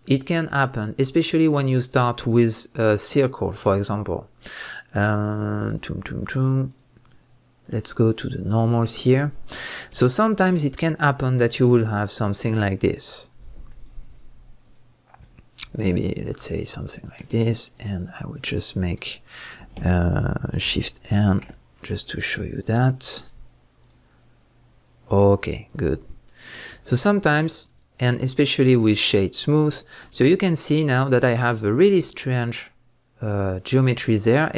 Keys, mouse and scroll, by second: 6.7-9.6 drag, 9.6-12.2 middle drag, 10.0-10.8 scroll up 2, 10.8-12.2 scroll up 1, 12.2 click, 13.3 click, 13.8 shift+click, 14.1 shift+click, 14.6 shift+click, 15.9 alt+click, 16.5-17.6 middle drag, 17.6-22.5 right drag, 21.2 shift+n, 22.5 click, 25.6 click, 26.2-27.7 middle drag, 26.8 Tab, 27.7-31.0 right drag, 29.8-30.1 scroll down 2, 30.1 Tab, 30.6-31.0 scroll up 2, 31.0-34.5 middle drag.